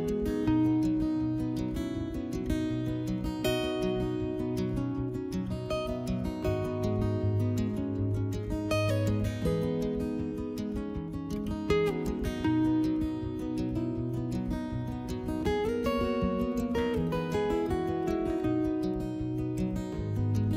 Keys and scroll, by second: 4.8 s, 18.0 3, 18.3 s.